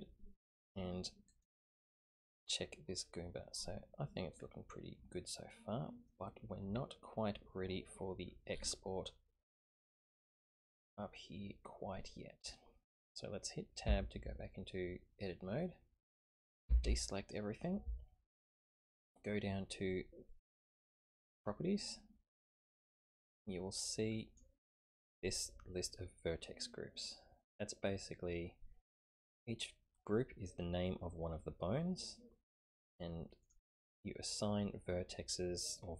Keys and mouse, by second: 1.9-6.1 middle drag, 13.8 Tab, 16.6 a, 16.8 a, 20.4 click, 23.1-24.4 drag, 33.4 click.